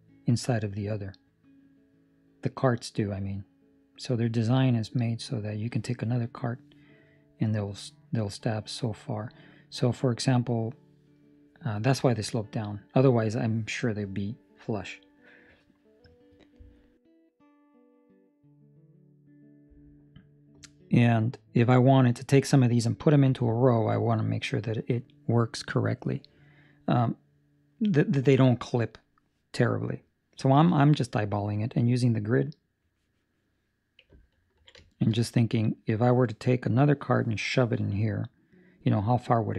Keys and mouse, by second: 34.2 ctrl+middle click, 34.7 shift+middle click.